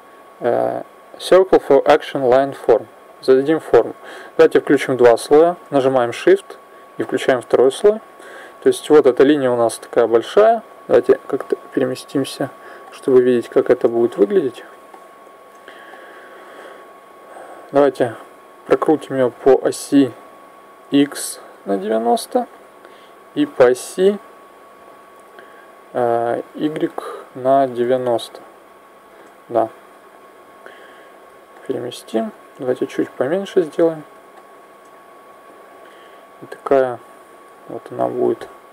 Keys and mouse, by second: 6.8 click, 10.8 click, 12.6 middle click, 13.2 KP_1, 19.1 r, 24.6 r, 30.3 click, 32.4 s, 35.0-38.1 drag.